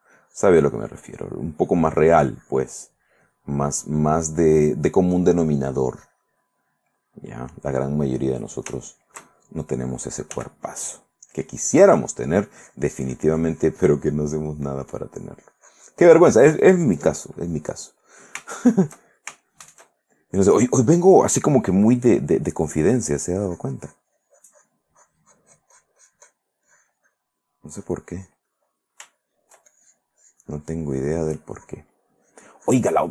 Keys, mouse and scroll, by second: 3.7 click, 4.4 click, 5.3-8.2 drag, 8.6 shift+middle click, 9.8 shift+middle click, 10.5 f, 11.1 click, 11.5-14.5 drag, 14.6 middle click, 15.1-17.5 drag, 17.6 click, 18.6-20.0 shift+middle drag, 22.6-26.7 drag, 26.8 click, 27.8 click, 28.4 click, 29.2 shift+middle click, 29.9 shift+click, 31.4 click, 32.3 click, 32.8 click.